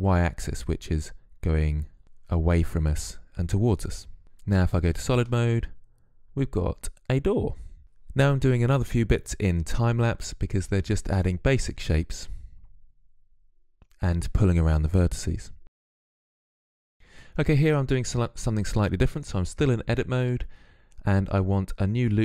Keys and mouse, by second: 4.2 z, 4.7-7.4 middle drag, 8.3 click, 8.6 shift+a, 9.7 s, 10.4 s, 11.1 KP_3, 11.6 z, 12.4 ctrl+Tab, 12.6 ctrl+Tab, 13.1-15.7 typing, 13.6 click, 14.3 click, 15.3 click, 16.0 click, 16.7 Tab, 16.9 Tab.